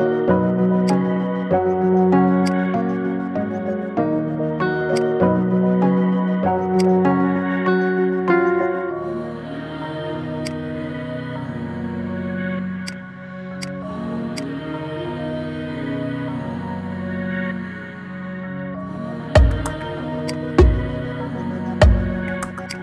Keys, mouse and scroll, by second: 0.1 g, 1.6 r, 3.3 KP_7, 4.0 g, 5.3-6.6 middle drag, 6.6 s, 7.2-8.6 middle drag, 8.6 KP_3, 9.5 g, 10.9-11.4 middle drag, 11.4 scroll up 3, 11.7-13.0 middle drag, 13.0 click, 13.7 click, 14.6-19.1 drag, 19.9-20.4 scroll down 1, 20.4 click.